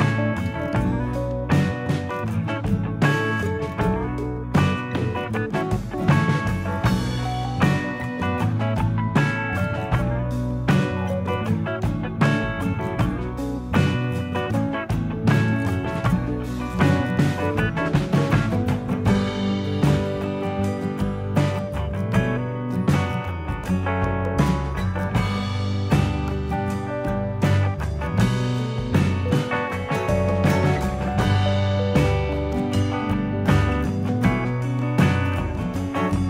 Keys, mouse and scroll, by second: 0.3 alt+click, 0.4 alt+click, 1.8 e, 2.8 s, 5.9 middle click, 6.7 Tab, 7.1 middle click, 8.0 Tab, 8.4 Tab, 8.7 click, 9.3 Tab, 10.0 alt+click, 10.6 middle click, 11.2 click, 13.1 middle click, 14.8 click, 15.7 middle click, 17.9 click, 20.0 Tab, 20.3-20.6 scroll down 4, 20.7 middle click, 21.3-21.7 scroll down 2, 21.8 shift+middle click, 22.3-22.9 scroll up 1, 23.3 alt+a, 23.7 middle click, 24.5 shift+middle click, 24.9 scroll down 2, 25.3 shift+middle click, 25.8 scroll down 2, 26.1 shift+middle click, 27.7 ctrl+s, 28.3 middle click, 29.2 shift+middle click, 29.6 scroll up 3, 29.9 shift+middle click, 31.3 shift+c, 31.9 shift+middle click, 33.3 ctrl+KP_1, 34.3 z.